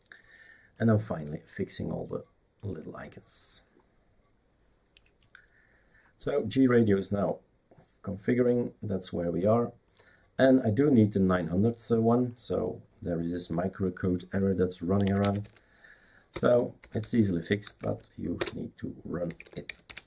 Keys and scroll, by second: 14.8-17.6 typing, 17.8 Tab, 18.3 Return, 19.0-20.0 typing.